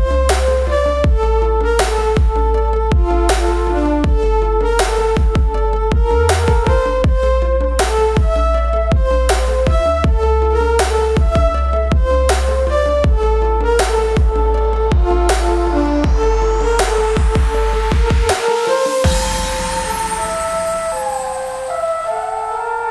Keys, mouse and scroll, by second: 0.5 ctrl+space, 3.3 click, 5.5 shift+click, 9.4-13.3 drag, 13.3-16.8 alt+drag, 16.8 ctrl+z, 17.8-22.9 alt+drag.